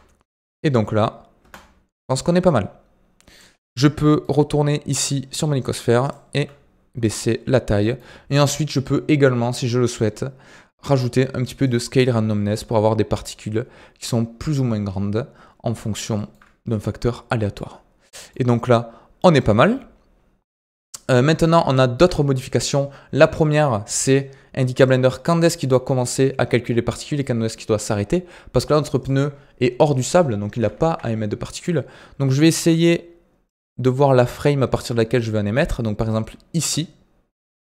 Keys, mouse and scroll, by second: 1.3 space, 2.0-3.6 drag, 3.6-4.0 scroll down 4, 4.0-4.3 middle drag, 4.3-4.9 scroll down 1, 4.9 click, 5.1-5.6 scroll up 3, 5.6 s, 6.3 s, 7.1-7.5 scroll up 8, 7.7-8.3 shift+middle drag, 8.3 click, 9.5-10.0 scroll down 9, 10.5 scroll down 1, 11.6-15.7 drag, 15.7 middle click, 16.3-17.3 scroll up 4, 17.3 scroll down 1, 17.5-18.4 middle drag, 18.4 scroll down 1, 18.5-19.7 middle drag, 19.7-20.1 scroll down 5, 20.4 scroll up 2, 21.4-22.6 shift+middle drag, 22.6-23.4 scroll up 10, 24.0-24.3 scroll down 3, 24.8-27.8 drag, 29.1-30.5 scroll down 2, 30.5 KP_1, 30.8 KP_3, 31.1-31.5 scroll up 5, 32.3-33.4 shift+middle drag, 33.4-36.5 drag.